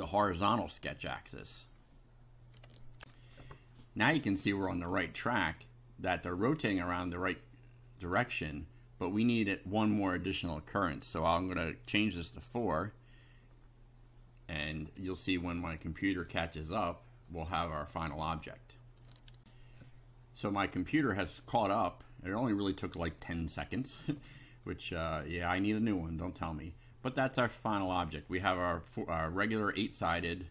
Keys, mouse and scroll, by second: 0.9 click, 3.0 ctrl+r, 4.3-5.0 drag, 5.3-6.5 middle drag, 12.3 click, 19.4 ctrl+r, 20.5 click, 21.3-22.6 middle drag, 23.1-24.0 middle drag, 24.1 middle click, 25.1 middle click, 26.2-27.5 middle drag, 29.4-30.5 middle drag.